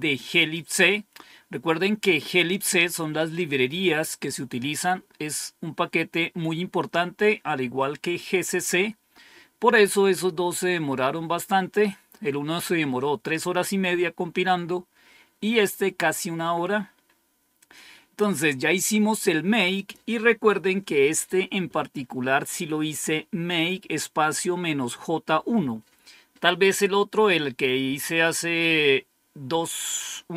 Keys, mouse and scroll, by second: 19.6 click, 20.7 Home, 20.9 Up.